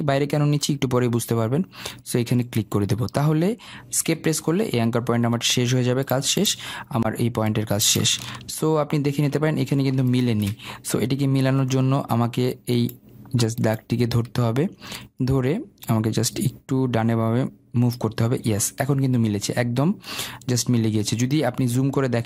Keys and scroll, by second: 4.3 Escape.